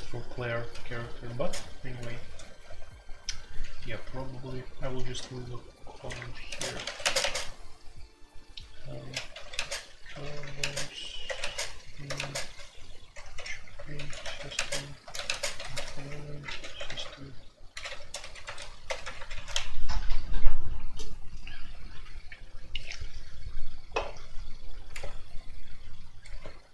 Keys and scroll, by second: 1.3-2.6 typing, 3.9-19.9 typing, 6.1 Return, 26.4 ctrl+d.